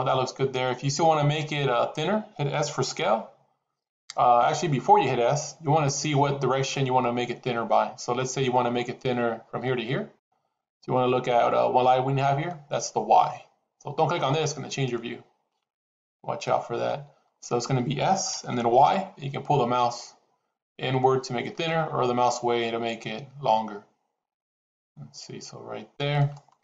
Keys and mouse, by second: 14.6 click, 16.0 KP_7, 18.2 s.